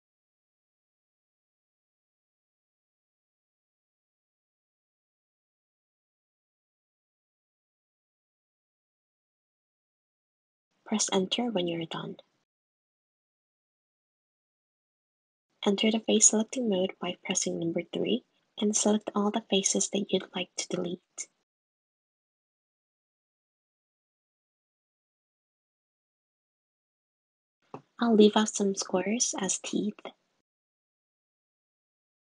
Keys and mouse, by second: 15.8 3, 17.4 click, 19.4-20.8 shift+drag, 21.4 shift+click, 23.0 shift+click, 23.9 shift+click, 25.0 shift+click, 25.9 shift+click, 26.9 shift+click, 29.4 shift+click, 30.9 shift+click, 31.5 shift+click.